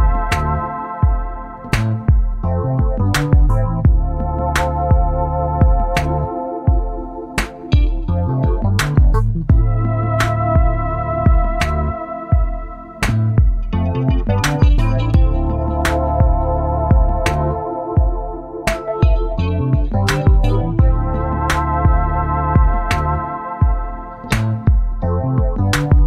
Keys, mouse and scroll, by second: 0.6 shift+click, 1.5 shift+click, 2.7 shift+click, 4.2 shift+Down, 5.1 shift+Down, 6.7 shift+Up, 10.6 click, 11.7 click, 12.5 KP_3, 12.7 KP_0, 13.0 KP_Enter, 15.5 click, 17.5 click, 19.8 click, 21.4 shift+click, 23.3 click, 24.3 KP_6, 24.5 KP_Enter.